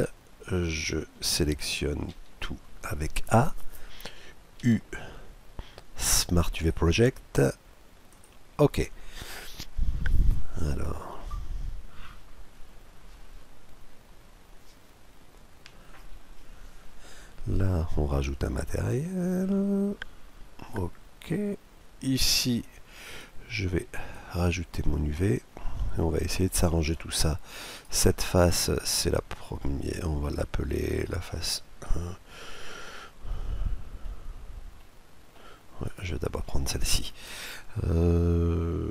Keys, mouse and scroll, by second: 1.8 a, 4.2 u, 17.9-19.5 drag, 23.1-24.5 drag, 24.9-26.5 middle drag, 27.4-32.6 right drag, 32.9-38.9 middle drag, 35.5-38.9 right drag.